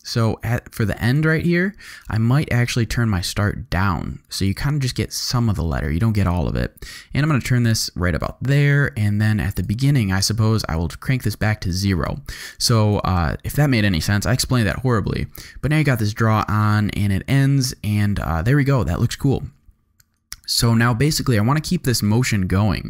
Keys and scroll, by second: 13.0 space, 18.1 space.